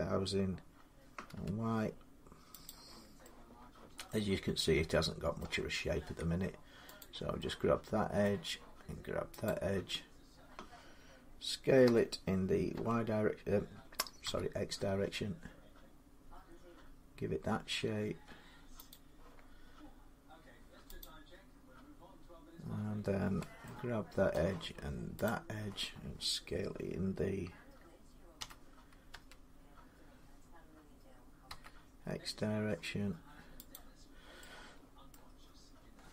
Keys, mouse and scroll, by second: 1.1 y, 2.4-3.6 drag, 3.9 middle click, 5.2 middle click, 7.1 click, 8.0 middle click, 9.2 shift+click, 11.6-12.5 typing, 14.0 x, 15.3 s, 18.7 click, 20.8 click, 24.1 middle click, 25.0 shift+click, 28.1-28.9 typing, 31.2 x, 32.6 s, 33.5-34.9 drag, 34.9-36.1 middle drag.